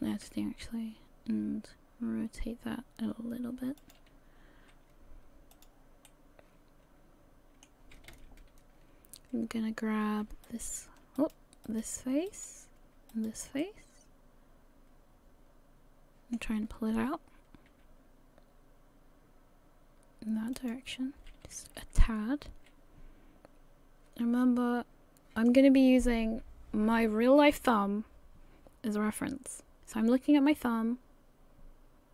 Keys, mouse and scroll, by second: 0.3 r, 5.5 click, 6.1 middle click, 7.0 middle click, 7.9 a, 8.1 a, 10.5 alt+right click, 10.5 alt+right click, 11.2 right click, 11.7 right click, 12.3 right click, 13.1 shift+right click, 13.4 shift+right click, 13.6 middle click, 17.7 g, 21.0-21.5 scroll down 3, 21.5 a, 21.7 a, 21.8 middle click, 27.6 click.